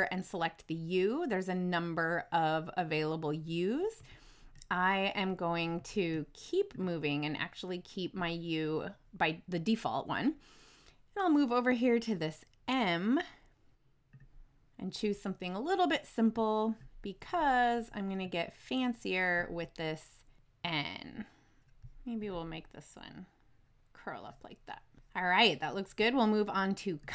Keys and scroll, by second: 3.9 Right.